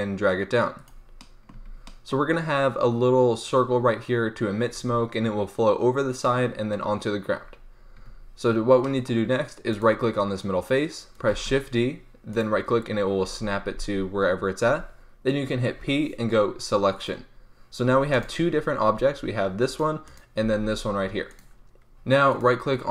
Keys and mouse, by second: 1.2 click, 1.5 Tab, 7.9 Tab, 9.6-11.4 right drag, 11.3 shift+d, 12.4 click, 15.7 p, 17.8 Tab, 18.1-18.9 drag, 18.9 g, 20.4 g, 21.1 click.